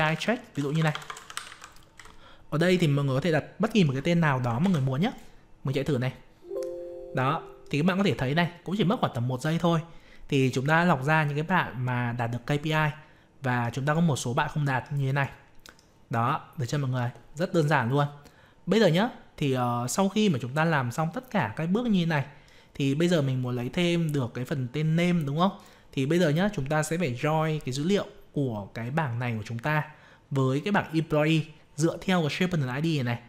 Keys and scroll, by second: 4.6 ctrl+c.